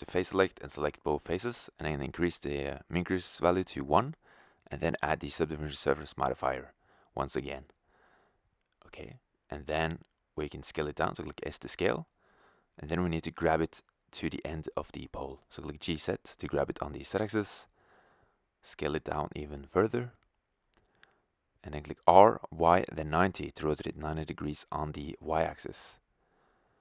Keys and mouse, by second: 2.3 click, 7.6 click, 8.3 Tab, 10.3 s, 12.5 click, 13.0 g, 16.8 middle click, 17.5 s, 18.7 click, 20.9-24.4 drag, 21.7 r, 26.7 s.